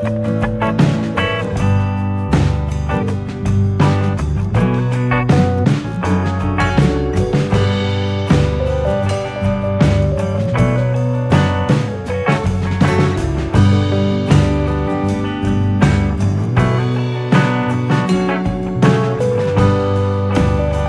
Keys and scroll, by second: 0.4 ctrl+=, 1.1 ctrl+=, 3.8 ctrl+-, 4.0 ctrl+-, 12.5 t, 19.7 F9.